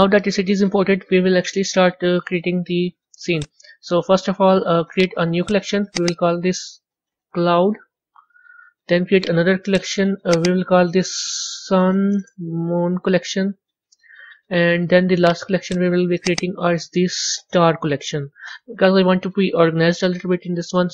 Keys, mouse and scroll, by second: 3.2 click, 4.8-5.9 right drag, 5.9 click, 6.0-9.0 drag, 9.1 right click, 10.2 click, 10.4-12.7 drag, 12.7 o, 15.1-16.2 right drag, 16.2 click, 16.3-19.3 drag.